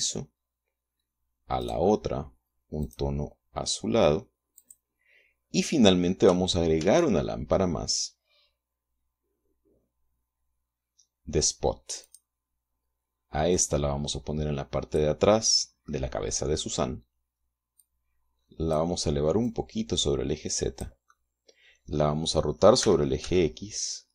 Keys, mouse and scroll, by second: 0.3 click, 2.0 right click, 3.2 click, 5.0 click, 7.2 shift+a, 12.4 click, 13.9-15.6 drag, 15.7 middle click, 18.2-19.3 drag, 19.8-21.4 drag, 21.5-22.5 middle drag, 23.2 r, 23.6 x.